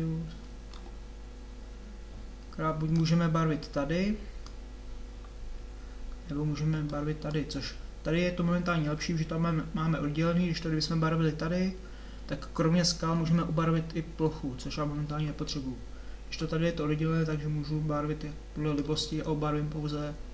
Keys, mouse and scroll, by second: 0.0-3.1 middle drag, 3.1-6.1 drag, 16.4-19.2 drag.